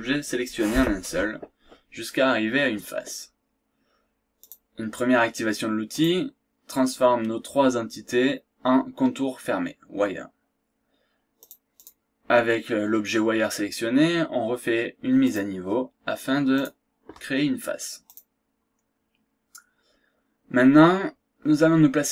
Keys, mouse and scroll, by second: 4.4 click, 5.9 click, 11.4 click, 15.3 click, 16.5 click, 18.1 click, 18.9 scroll down 2, 19.2-19.5 scroll up 1.